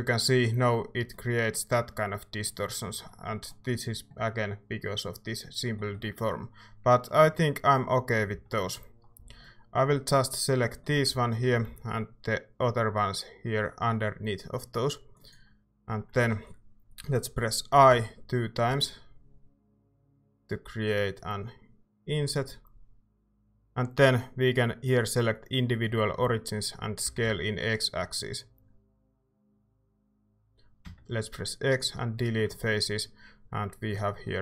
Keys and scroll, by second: 8.3 c, 11.1 z, 11.6 c, 13.7-14.4 typing, 16.1 z, 17.7-18.7 typing, 26.8-27.7 typing, 30.8 x.